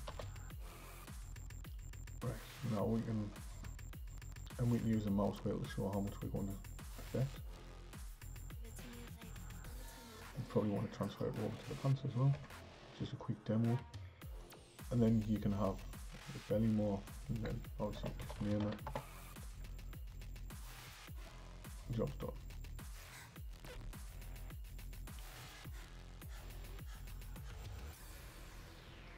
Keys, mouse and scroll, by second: 12.4 Tab, 14.4-17.0 drag, 17.0-18.4 drag, 18.4 l, 20.7-23.9 drag, 24.0 click.